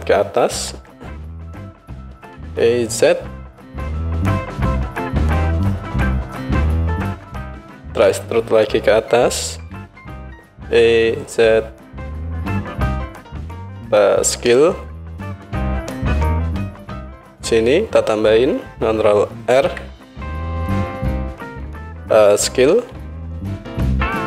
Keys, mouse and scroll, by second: 0.7 e, 5.9-13.4 drag, 9.6 e, 13.4-24.2 middle drag, 14.5 s, 19.5 ctrl+r, 22.7 s.